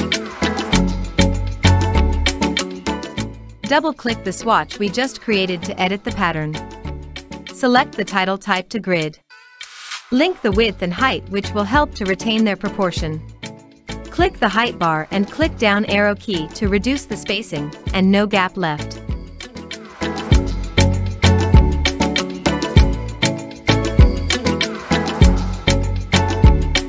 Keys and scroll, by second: 15.9 Down, 16.5 Down, 16.9 Down, 17.4 Down, 17.9 Down, 18.5 Down, 19.5 Down, 22.5 Down, 23.3 Down.